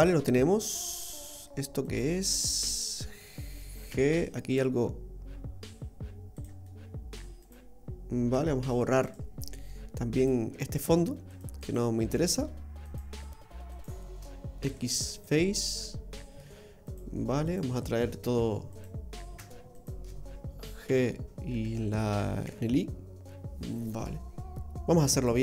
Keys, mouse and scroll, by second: 0.6 middle click, 1.1 middle click, 1.8 right click, 3.3 middle click, 3.9 g, 6.6 middle click, 7.4 right click, 8.3 Tab, 9.0 right click, 10.2 click, 10.8 right click, 11.3 shift+right click, 11.6 shift+right click, 13.0 shift+right click, 13.9 shift+right click, 14.6 x, 15.5 middle click, 17.0 right click, 17.4 right click, 18.2 Tab, 18.7 right click, 19.7 shift+right click, 20.8 g, 23.4 middle click, 25.1 right click.